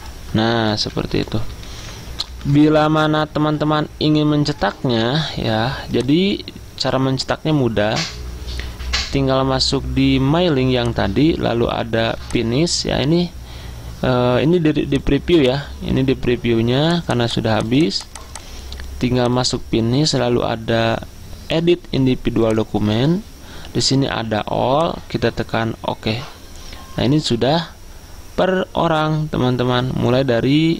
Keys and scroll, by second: 1.2 Up, 1.5 Up, 1.6 Up, 1.9 Up, 2.1-2.9 Up, 2.3 Left, 2.6 Left, 2.8 Left, 3.3 Right, 3.4 Right, 4.2 Down, 4.7 Up.